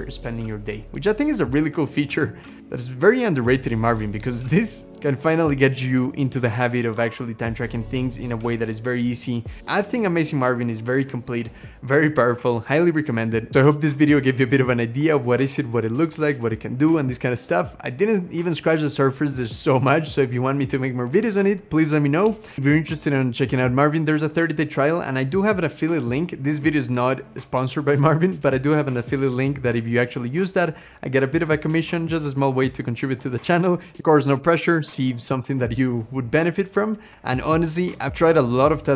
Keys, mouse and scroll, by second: 1.6-2.2 scroll up 2, 2.4 scroll down 2, 8.0-8.6 scroll up 1, 9.4-10.2 scroll up 5.